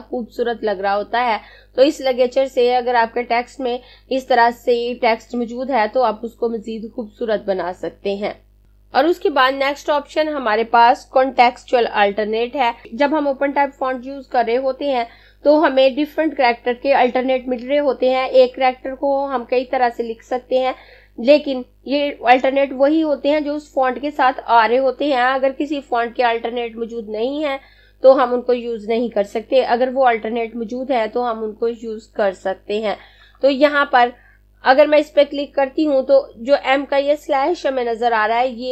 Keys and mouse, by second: 12.6 click.